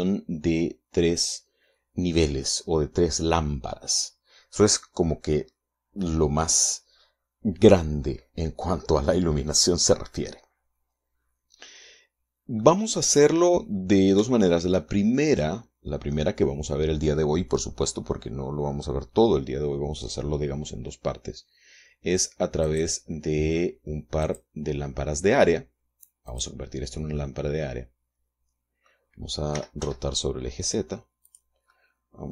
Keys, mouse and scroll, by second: 12.9-14.0 middle drag, 14.6 shift+middle click, 15.6-16.6 middle drag, 23.0 click, 24.6 click, 26.6 click, 27.5-29.4 middle drag, 29.8 r, 30.1 z, 31.6 click, 32.0 middle click.